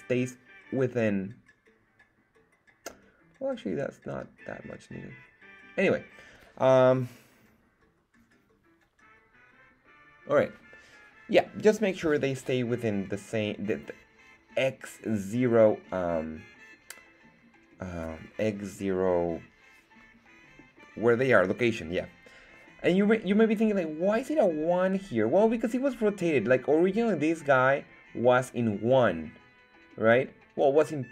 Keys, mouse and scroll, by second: 11.8 scroll down 2.